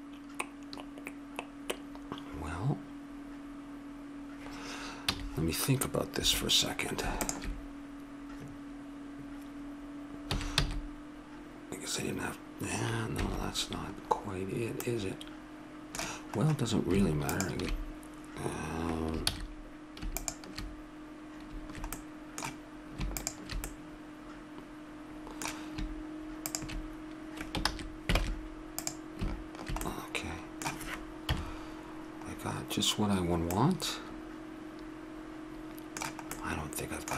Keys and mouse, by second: 7.1-9.0 drag, 10.3 s, 14.0-15.3 middle drag, 17.3-19.2 drag, 19.2 ctrl+z, 20.1 click, 24.3 click, 24.3 middle click, 24.5 click, 24.5 middle click, 25.1 middle click, 26.4-27.6 drag, 27.6 ctrl+z, 28.2 ctrl+Tab, 29.8 middle click, 31.2 KP_7, 33.5 middle click, 36.3 middle click.